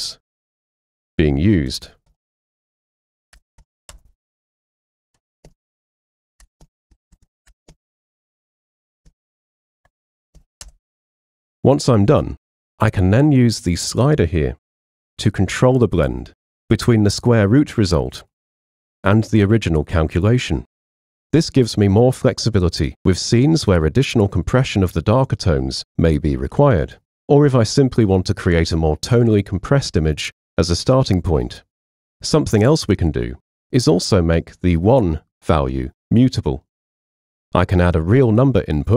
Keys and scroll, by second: 1.7 BackSpace, 2.1 shift+g, 3.4 BackSpace, 3.6 shift+g, 3.9 Return, 5.5 super+v, 6.4 BackSpace, 6.6 shift+b, 6.9 Right, 7.5 BackSpace, 7.7 shift+b, 8.8 BackSpace, 9.1 shift+b, 10.2 BackSpace, 10.4 shift+b, 10.7 Return.